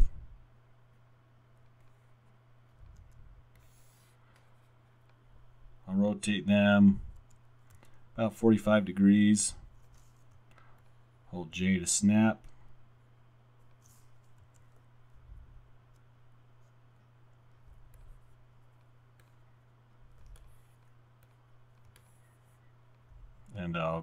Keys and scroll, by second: 3.0 w, 6.6 r, 7.2 w, 7.8 e, 10.4 j, 14.4 w, 15.5 w.